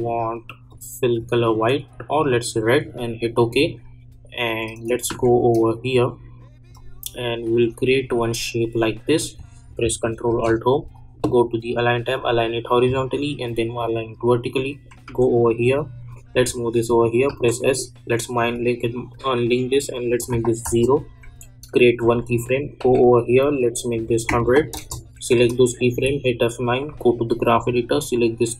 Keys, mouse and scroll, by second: 5.1 k, 6.7-10.2 drag, 10.2 ctrl+alt+Home, 12.1 click, 15.0 j, 16.3 [, 17.3 s, 18.4 click, 20.6 Return, 22.0 click, 22.8 k, 24.7 Return, 25.9 F9, 26.8 click.